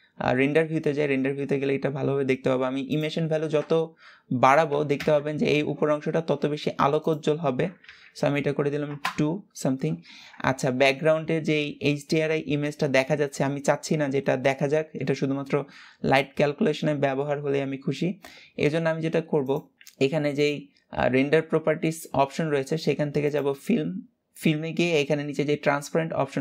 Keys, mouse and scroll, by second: 2.6-5.6 drag, 6.7-9.8 drag, 9.8 ctrl+s, 19.0-26.4 drag.